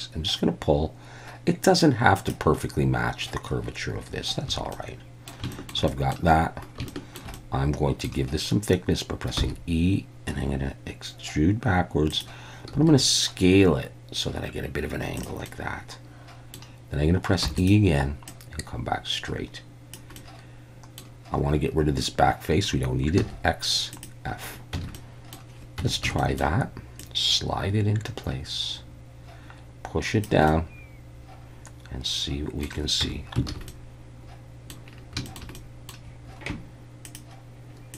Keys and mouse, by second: 2.2 click, 4.5 a, 4.7 middle click, 5.5 shift+middle click, 5.9 middle click, 6.9 shift+middle click, 7.5 middle click, 9.4 e, 12.1 click, 12.7 s, 15.2 click, 15.5-16.5 middle drag, 17.4 e, 17.6 click, 18.3-19.9 drag, 20.2 middle click, 23.2 x, 24.7 Tab, 24.9-25.4 middle drag, 25.8 Tab, 26.0 a, 26.2 middle click, 27.1-30.2 drag, 30.5-32.6 middle drag, 33.0 Tab, 33.5 alt+a, 33.7-34.7 middle drag, 35.3 shift+middle drag, 35.5-35.9 middle drag.